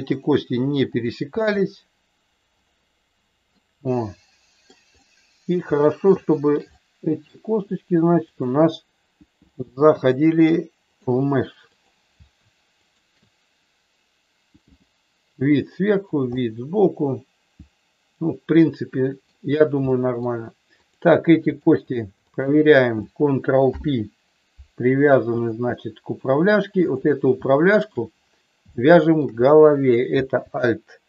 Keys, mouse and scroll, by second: 0.8 click, 1.2 g, 3.5-4.6 middle drag, 5.0 middle click, 6.2 shift+middle click, 6.6 middle click, 8.3 shift+click, 9.6 g, 11.0 click, 11.7 click, 14.6 g, 16.2-19.2 middle drag, 20.0 middle click, 20.7 click, 21.5 shift+click, 22.3 shift+click, 23.6 ctrl+p, 25.3 click, 25.6 middle click, 27.5 shift+middle click, 28.7 shift+middle click.